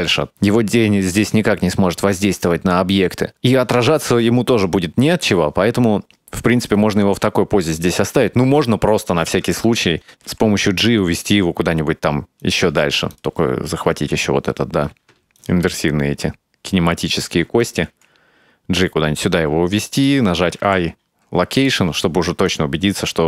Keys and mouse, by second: 8.0-8.6 drag, 9.0 shift+middle drag, 10.1 g, 10.3 g, 13.2 right click, 15.4 shift+right click, 17.2 right click, 17.7 shift+right click, 17.9 g, 20.7 i, 22.5-23.2 drag.